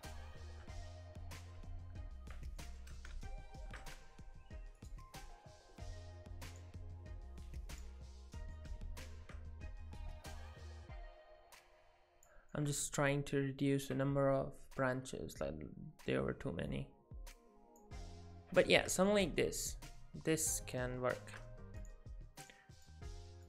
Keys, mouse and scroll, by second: 0.3 middle click, 2.6 shift+middle click, 3.0 middle click, 4.8 click, 7.7 click, 8.6 middle click, 10.3 click, 12.5 middle click, 16.7 click, 18.4 shift+middle click, 18.7 shift+middle click, 19.1 middle click, 21.8 click, 22.4 click.